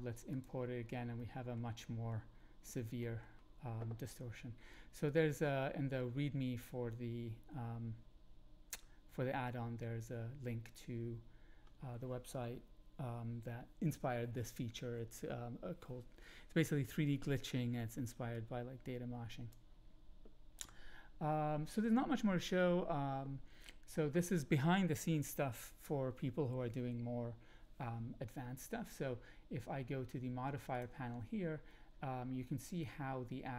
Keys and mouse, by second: 0.3 middle click, 1.1-1.5 middle drag, 1.8 middle click, 3.0 middle drag, 5.0-10.6 middle drag, 18.3-19.5 drag.